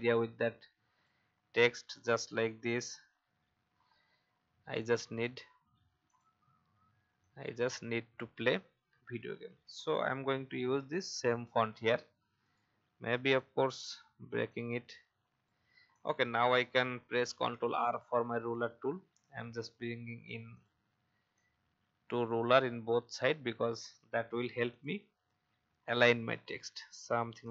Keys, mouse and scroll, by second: 0.4 shift+click, 2.0 shift+click, 3.2 shift+Up, 3.5 shift+Up, 4.3 alt+scroll down 1, 5.6-6.0 alt+scroll down 1, 6.0-10.3 drag, 10.3 i, 11.0 click, 11.4 v, 11.9-12.4 alt+scroll up 1, 12.4 right click, 13.2 click, 14.4 shift+click, 15.9 click, 17.2 ctrl+r, 18.5-20.2 drag, 20.5 click, 21.3-23.1 alt+drag, 23.7 click, 25.8-27.5 shift+drag.